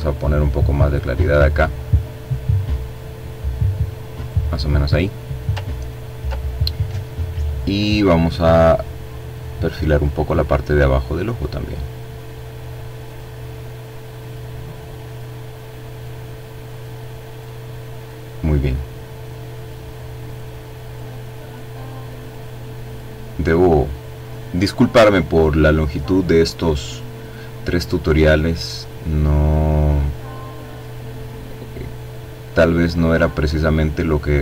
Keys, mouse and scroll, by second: 2.8-3.8 scroll down 2, 3.8 ctrl+click, 7.9 click, 9.4 click, 11.2 click, 12.3 click, 13.2 click, 14.1 click, 14.8 click, 16.1 click, 17.6 click, 18.4 click, 20.2 click, 21.0 click, 25.4 click, 26.5-31.7 drag, 32.1-33.6 drag, 33.9-34.4 drag.